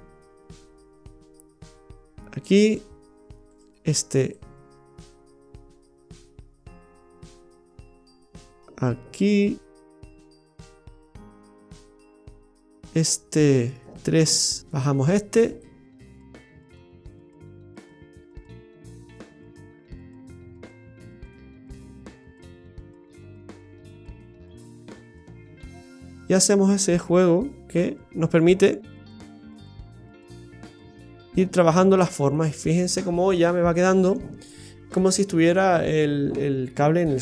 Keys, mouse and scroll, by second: 2.8-3.5 scroll down 1, 3.5 right click, 3.5 scroll down 1, 4.4 click, 11.5 right click, 11.9 middle click, 14.2 KP_3, 14.6 right click, 15.6 click, 18.6 scroll down 1, 19.4 right click, 19.4-19.9 scroll down 1, 20.2 click, 26.8 click, 28.0-28.9 scroll down 3, 28.4 middle click, 32.7-34.2 scroll down 4, 33.2 middle click.